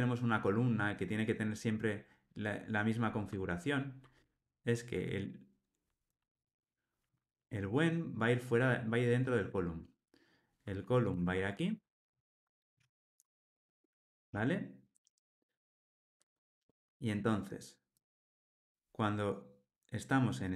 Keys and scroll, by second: 11.1 super+x, 12.7 super+v.